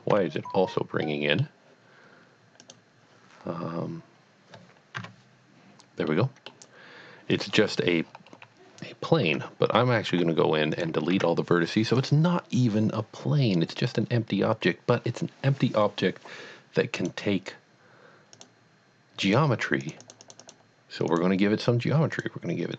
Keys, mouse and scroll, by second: 1.1-2.6 middle drag, 2.6 click, 6.1 middle click, 6.5 middle click, 7.8-9.3 scroll down 3, 9.3 Tab, 9.7 a, 10.6 x, 10.7 click, 11.2 Tab, 12.0 click, 17.0 click, 18.3 click, 19.2 click, 19.8 click, 20.0 double click, 20.2 click, 20.4 click, 21.1 click, 22.1 click.